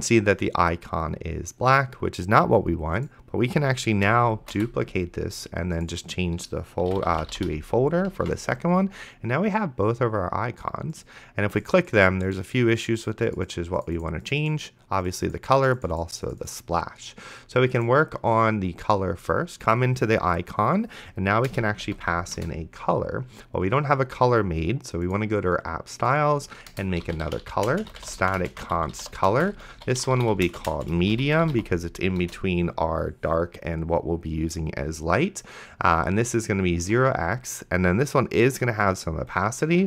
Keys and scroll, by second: 4.6 alt+shift+Down, 6.6-8.1 typing, 8.5 ctrl+s, 21.5-22.4 typing, 26.7-32.0 typing, 32.2 Return, 37.0 x, 39.6-39.8 typing.